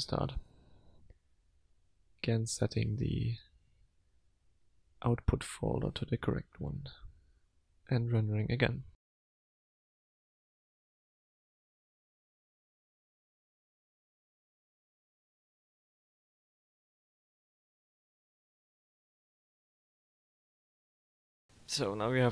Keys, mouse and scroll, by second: 1.7 click, 2.3 click, 2.7 click, 3.4 click, 4.6 click, 7.5 click.